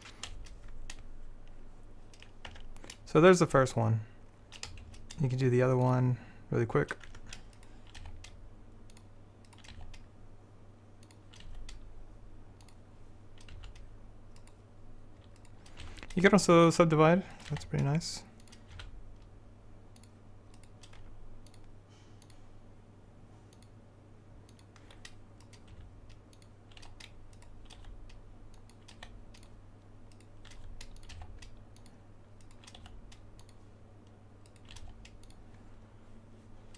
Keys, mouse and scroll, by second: 2.6 Tab, 5.0 shift+a, 7.2 Tab, 8.1 g, 9.9 g, 11.6 r, 13.7 s, 16.0 w, 17.7 g, 18.9 s, 20.7 click, 21.6 right click, 24.2-25.6 drag, 25.9 s, 27.0 g, 27.9 r, 29.1 g, 30.7 r, 31.3 g, 32.9 r, 34.9 g.